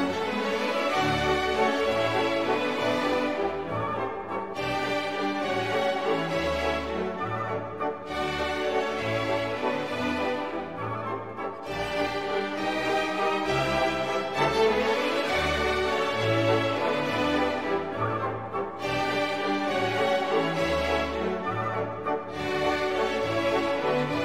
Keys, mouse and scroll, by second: 2.3 click, 3.7 click, 4.7 click, 6.4 click, 7.6 9, 8.4 click, 9.7-10.6 scroll down 3, 10.8-12.6 drag, 13.8 click, 14.7 click, 15.4-16.9 drag, 17.6 click, 19.5 click, 20.9 click, 21.8 click, 22.4-23.4 drag, 23.7 ctrl+click.